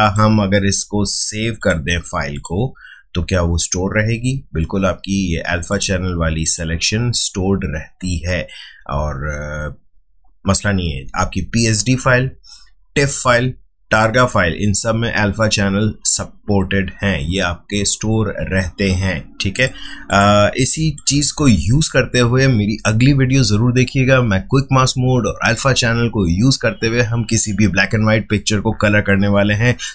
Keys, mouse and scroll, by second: 0.0 click.